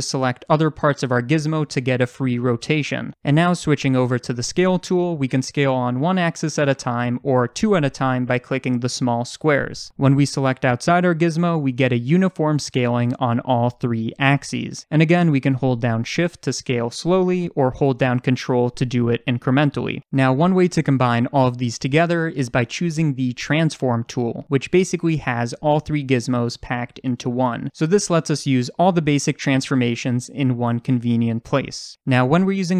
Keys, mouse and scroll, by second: 2.7 ctrl+z, 5.2-23.4 drag, 19.4 ctrl+z, 24.3-31.2 drag, 29.3 ctrl+z.